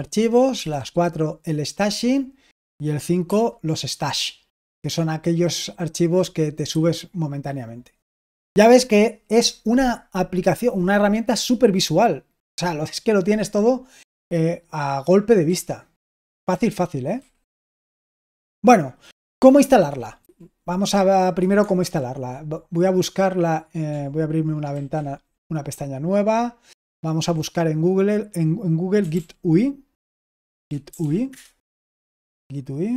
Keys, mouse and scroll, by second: 0.5 typing, 3.2 5, 4.6 4, 6.6 5, 15.4-17.1 typing, 20.1 q, 21.7 super+l, 24.7 ctrl+t, 28.7-31.4 typing.